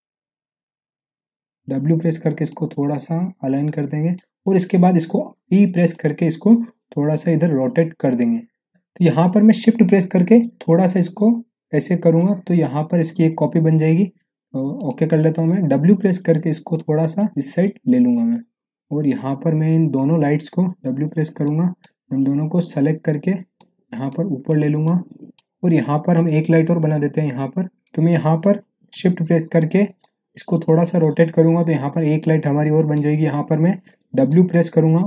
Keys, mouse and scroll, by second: 1.6 w, 2.4-4.3 drag, 5.1 e, 5.9-8.7 drag, 8.7 ctrl+z, 10.5-13.1 shift+drag, 15.6 w, 18.5-20.8 middle drag, 20.8 w, 21.4-22.1 ctrl+drag, 24.3 scroll down 1, 24.4-25.0 middle drag, 27.9 click, 30.0-33.1 shift+drag, 34.5 w.